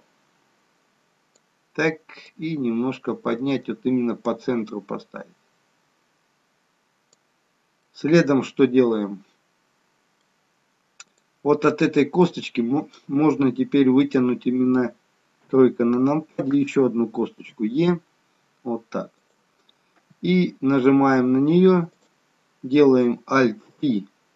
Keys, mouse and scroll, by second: 2.2 click, 7.8 middle click, 11.0 click, 12.1 middle click, 14.0 click, 15.5 KP_3, 17.5 e, 21.9 click, 23.6 alt+p.